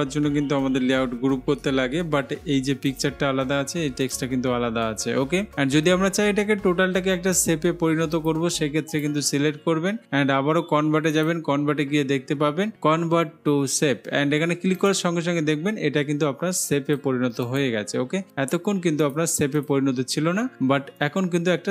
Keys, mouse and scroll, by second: 3.1-4.1 drag, 4.3-5.3 drag, 8.4-10.0 drag, 11.4-12.4 drag, 15.0 click, 16.9 click, 21.3 click.